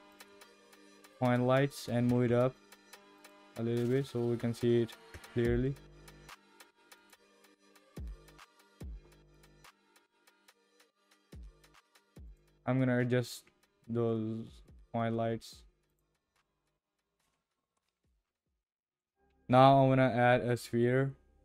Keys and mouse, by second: 0.7 click, 1.9 g, 5.1 KP_0, 7.1 click, 9.3 click, 12.3 click, 13.9 g, 16.4 click, 16.6 g, 17.5 click, 18.7 drag, 19.3 shift+a.